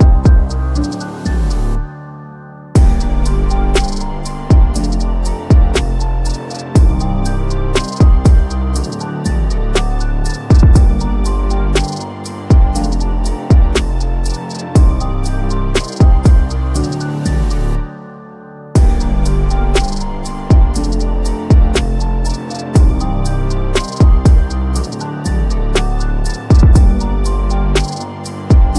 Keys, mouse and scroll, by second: 0.7 click, 7.6 ctrl+d, 8.4 click, 10.1 click, 10.4 ctrl+d, 11.2 click, 13.9 click, 18.2 click, 20.5 click, 22.2-24.3 drag, 24.3-25.3 scroll down 1, 25.3 click, 25.3 scroll down 1, 25.3-28.5 drag.